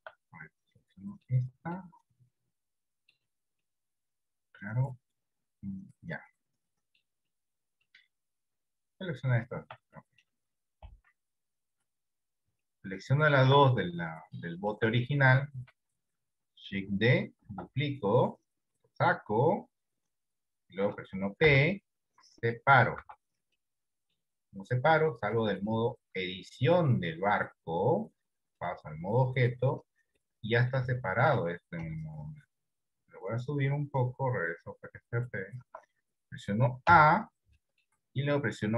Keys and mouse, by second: 0.5 middle click, 1.8-3.2 middle drag, 3.7-7.0 middle drag, 7.3 middle click, 10.0 middle click, 10.9 KP_1, 11.5 KP_3, 12.9 shift+middle click, 14.1-15.2 middle drag, 17.5 shift+d, 21.5 p, 23.2 Tab, 23.7 middle click, 26.7 click, 28.6 click, 30.3 middle click, 31.2 shift+middle click, 31.9 KP_3, 33.8-35.4 drag, 35.9 Tab, 37.0 a, 37.8 shift+middle click.